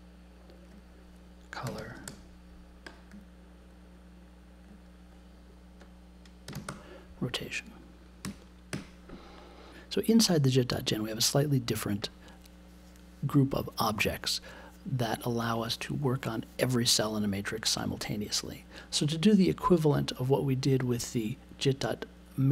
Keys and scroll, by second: 1.4-2.3 typing, 6.4 r, 8.2 BackSpace, 8.7 t.